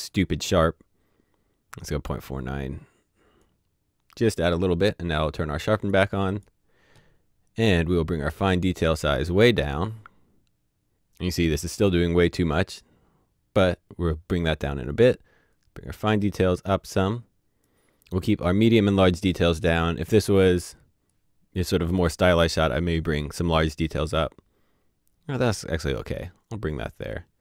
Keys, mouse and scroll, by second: 2.3 click, 7.6 click, 8.8 click, 14.9 click, 21.1 click.